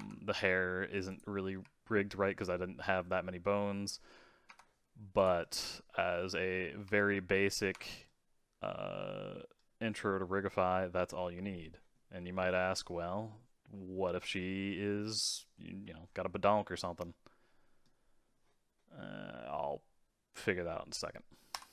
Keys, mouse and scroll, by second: 1.0 click, 1.5 r, 5.1 click, 5.4-6.8 middle drag, 6.8 r, 8.0-13.4 middle drag, 14.5-15.0 scroll down 4, 15.0-16.0 middle drag, 16.0 scroll up 4, 16.3-19.4 middle drag.